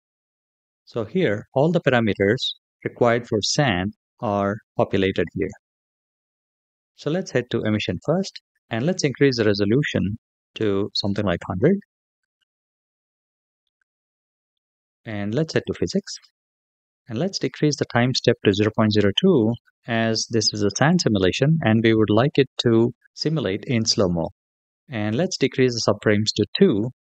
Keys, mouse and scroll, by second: 0.4 click, 8.6-11.4 drag, 10.9 KP_0, 12.8-13.4 scroll up 3, 13.4-14.3 middle drag, 15.3 click, 17.8-20.9 drag, 24.9-27.0 drag.